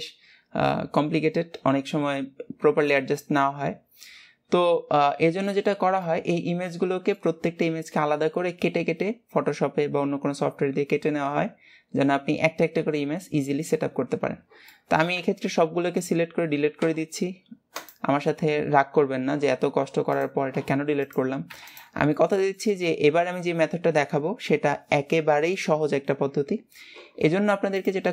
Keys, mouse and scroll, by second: 4.9-5.4 scroll up 1, 5.4 shift+middle click, 5.8 scroll up 2, 6.2-9.3 middle drag, 14.3-14.8 scroll down 3, 14.8 middle click, 15.4 a, 22.3 shift+middle click, 23.1 scroll up 2.